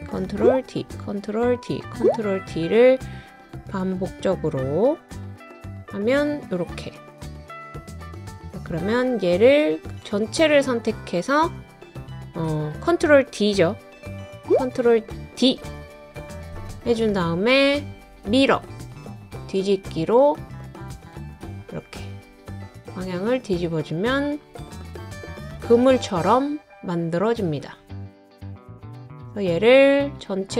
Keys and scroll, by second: 0.3 super+d, 0.9 super+d, 15.4 super+d.